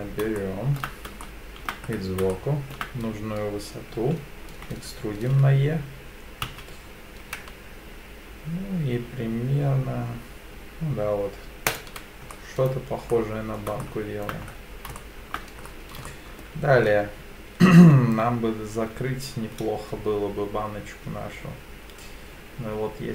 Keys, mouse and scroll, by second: 0.4 shift+middle click, 1.2 shift+middle click, 1.9 scroll up 1, 2.3 shift+middle click, 4.5 e, 6.5 z, 11.7 ctrl+click, 12.3 middle click, 13.1 middle click, 13.8 shift+middle click, 14.3-14.7 shift+scroll up 3, 15.0 shift+middle click, 15.6-16.0 scroll up 2, 16.1 shift+middle click.